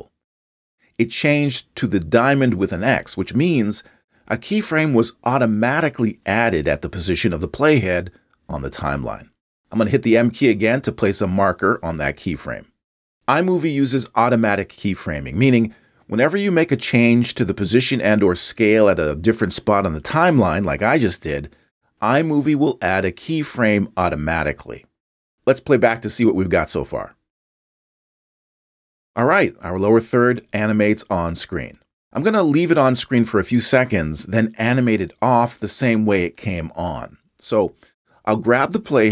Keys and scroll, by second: 11.0 m.